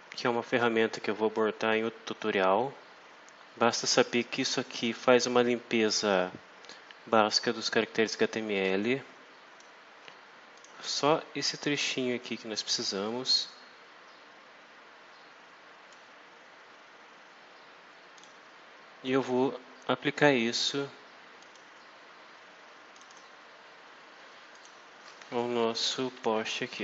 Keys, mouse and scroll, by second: 4.9-6.2 drag, 8.6-9.7 drag, 10.5 click, 12.1-16.0 drag, 18.1 click, 21.3 click, 22.9 click, 24.4 click, 25.6 Right, 26.2 Delete.